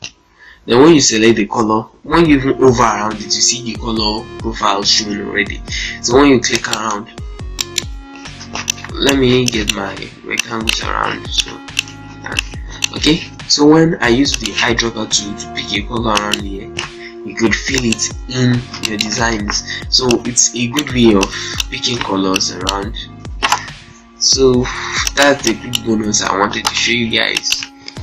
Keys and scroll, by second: 7.2 z, 8.2 ctrl+space, 11.9 z, 13.1 ctrl+space, 18.3 ctrl+space, 18.5 ctrl+z, 18.9 ctrl+space, 20.8 z, 21.9 ctrl+space, 23.1 ctrl+z, 23.8 shift+Page_Down, 25.8 F3, 26.0 F4.